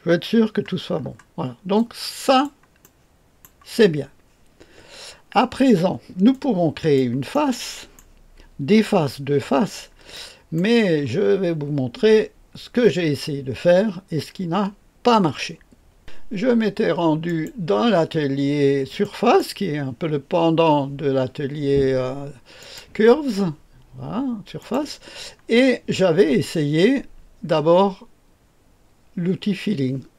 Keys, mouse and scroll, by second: 0.2-1.7 scroll down 3, 1.7-2.4 drag, 3.4 right click, 6.2 click, 7.3 right click, 17.2 click, 18.9 click, 22.5 click, 24.5 click.